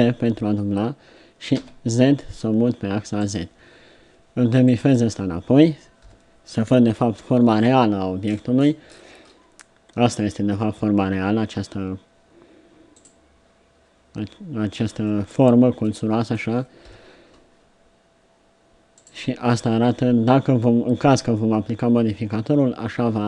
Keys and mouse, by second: 6.1 KP_7, 14.7 middle click, 16.8 KP_7.